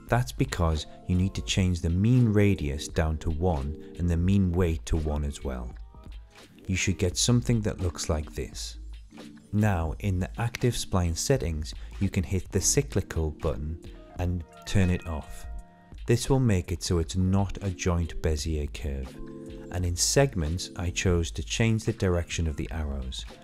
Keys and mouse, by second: 0.7 ctrl+z, 1.5 a, 2.4 click, 4.4 click, 6.4 shift+middle click, 7.2 middle click, 7.9 shift+middle click, 8.5-10.4 middle drag, 11.7 click, 12.7 click, 14.4 click, 15.4 shift+middle click, 15.8 click, 17.4 Delete, 18.3 middle click, 18.8 shift+middle click, 19.3 shift+middle click, 21.7 a, 23.3 click.